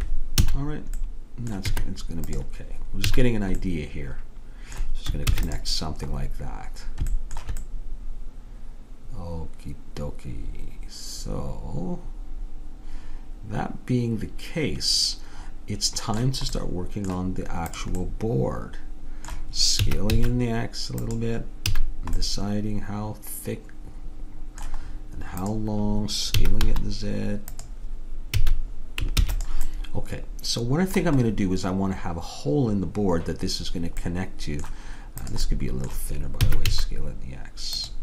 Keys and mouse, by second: 0.5 a, 1.7 Tab, 3.1 a, 5.4 ctrl+s, 16.6-17.8 middle drag, 17.8-19.6 drag, 19.9 s, 21.7 a, 22.3 click, 25.5-27.3 drag, 26.4 s, 28.4 a, 29.2 ctrl+s, 34.1 middle click, 34.3 middle click, 34.5 middle click, 35.3-37.2 drag, 36.5 s.